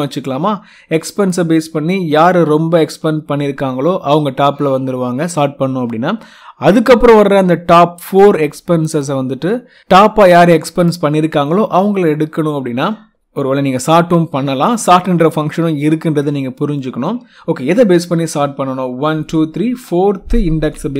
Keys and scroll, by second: 20.6 4.